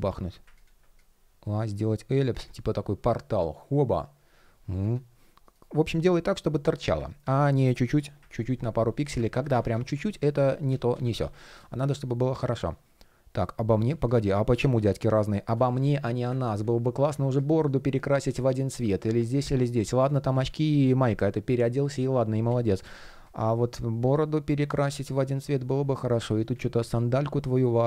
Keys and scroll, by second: 5.1 shift+p, 6.9 super+z, 8.0 super+z, 8.9 super+z, 16.6 shift+p, 20.1 super+z, 25.6 shift+p.